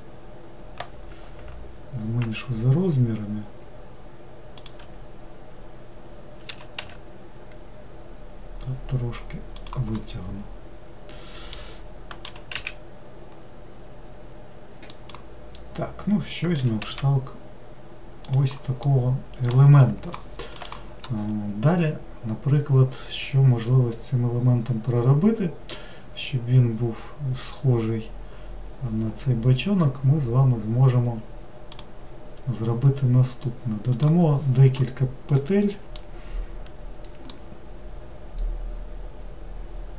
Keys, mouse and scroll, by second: 6.5 s, 10.0-12.3 middle drag, 12.3 g, 18.9-22.0 middle drag, 35.4-39.9 middle drag.